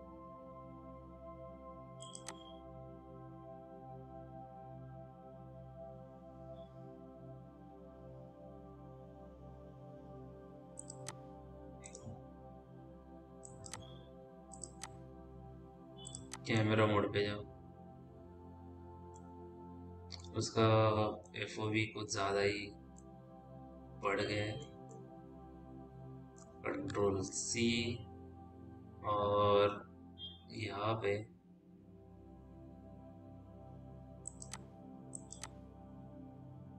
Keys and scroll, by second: 27.7 ctrl+c.